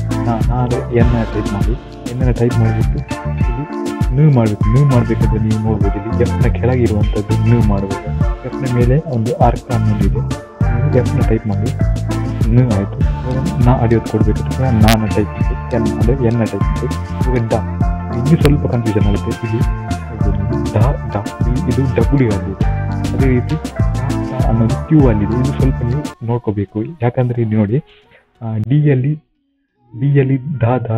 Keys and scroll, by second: 1.5 n, 2.8 typing, 11.6 typing, 13.5 typing, 15.0 n, 24.1 typing.